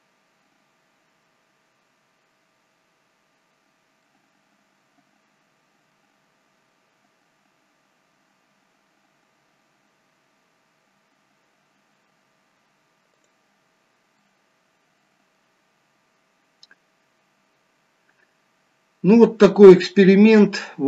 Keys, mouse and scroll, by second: 3.4 scroll up 2, 4.4 middle click, 13.5 click, 14.8 middle click, 16.2-16.6 scroll down 2.